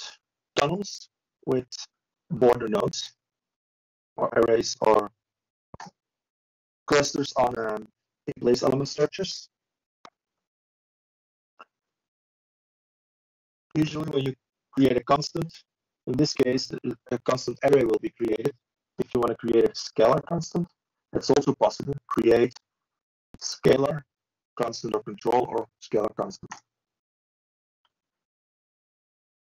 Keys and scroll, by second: 0.1 ctrl+8, 10.8 ctrl+space, 12.5 ctrl+8, 18.0 typing, 20.8 typing.